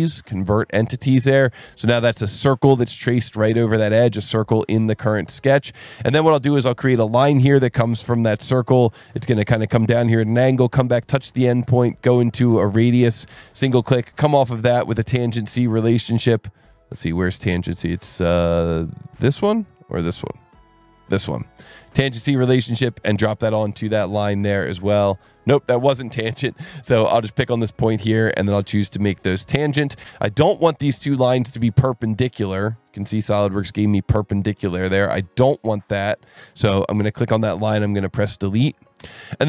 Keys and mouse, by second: 2.4 click, 4.3 click, 6.7 click, 9.6 click, 13.3 click, 23.0 click, 23.8 Escape, 27.6 click, 29.2 click, 31.5 alt+1, 32.0 click, 32.9 ctrl+shift+click, 34.5 ctrl+click, 35.3 click, 35.7 alt+click, 36.7 alt+1, 38.1 click, 38.6 click, 39.2 Delete.